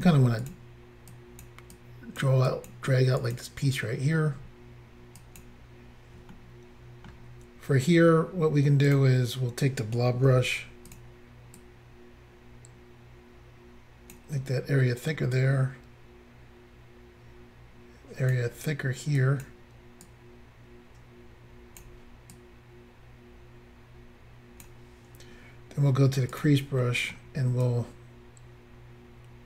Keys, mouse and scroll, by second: 0.1 f, 0.4 click, 0.5 click, 1.1 click, 1.7 click, 2.5 click, 2.7 click, 3.2 click, 3.3 click, 5.2 click, 5.4 click, 6.4 shift+middle click, 8.9 click, 9.0 click, 10.5 f, 10.9 click, 11.0 click, 11.6 click, 15.4 click, 19.2 click, 20.1 click, 22.4 click, 26.3 click, 26.4 click, 26.8 middle click.